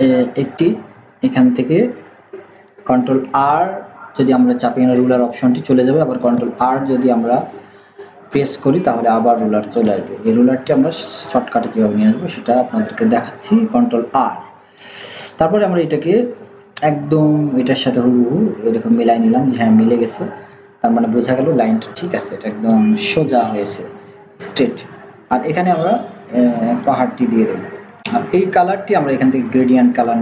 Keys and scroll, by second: 5.1 ctrl+r.